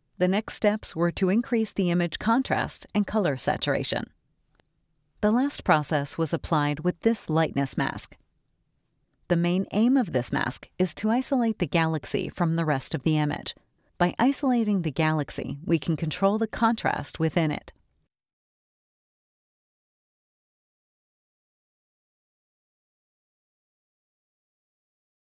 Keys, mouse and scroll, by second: 1.8 click, 4.2 click, 5.9 click, 7.8 click, 9.6 click, 14.8-15.1 drag, 16.1 middle click, 16.2-17.1 scroll down 4, 16.4 middle click, 16.6 middle click, 16.8 middle click, 20.5 click, 22.4 click, 24.0 click.